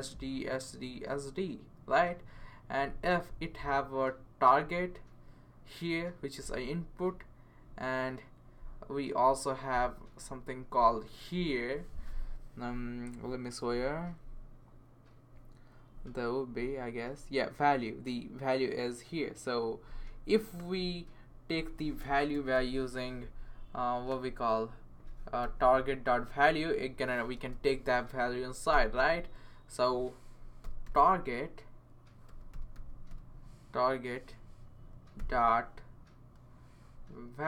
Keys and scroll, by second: 22.0 BackSpace, 22.3 BackSpace, 22.5 BackSpace, 25.6 super+/, 26.4 Right, 27.4-28.7 typing, 30.4-33.6 typing, 34.9-35.7 typing, 37.3-37.4 typing.